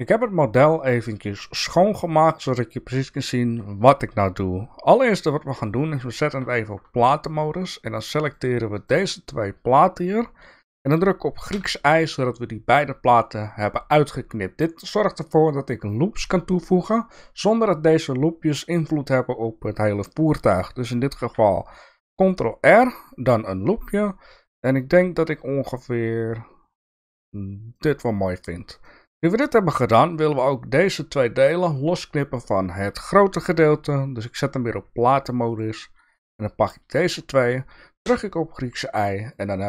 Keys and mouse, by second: 6.3 3, 12.7 y.